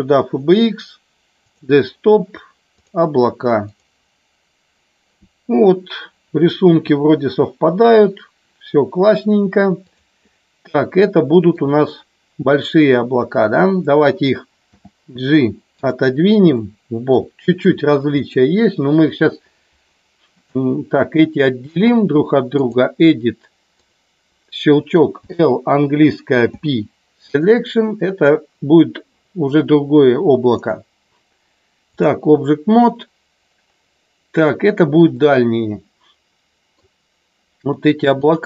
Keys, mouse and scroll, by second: 6.7 g, 9.9 click, 11.1 shift+middle click, 14.7 g, 16.4 shift+middle click, 18.2 click, 20.2 click, 21.7-22.8 drag, 25.2 l, 26.3 p, 30.6-32.1 drag, 35.1-36.7 middle drag.